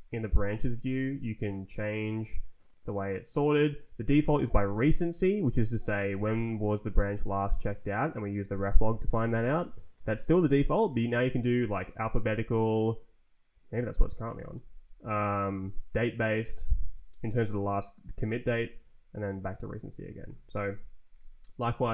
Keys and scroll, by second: 0.9 Down, 1.4 Up, 1.8 Down, 3.4 Up, 9.7 Down, 11.1 Up, 11.7 space, 13.5 Down, 13.9 Up, 14.4 s, 14.7 Down, 15.4 space, 16.3 s, 16.8 Down, 18.3 Up, 18.8 space, 19.6 Down, 19.9 Up, 21.0 ], 21.5 Return.